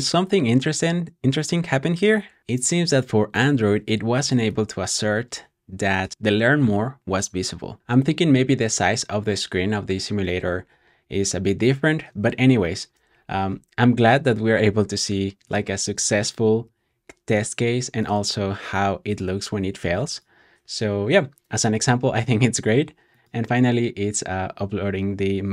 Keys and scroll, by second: 16.0 typing, 20.1 typing.